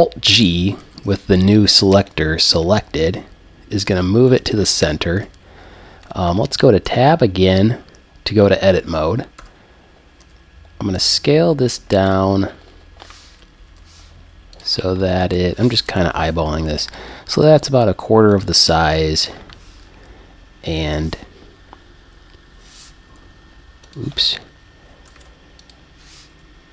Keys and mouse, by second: 0.8 alt+g, 6.9 Tab, 9.4 a, 10.2 s, 12.1 click, 13.1 click, 13.4 click, 13.7 g, 14.6-15.9 drag, 15.9 g, 16.9-18.4 drag, 17.5 s, 20.0 g, 24.0-26.7 drag, 25.2 super+z, 26.3 g.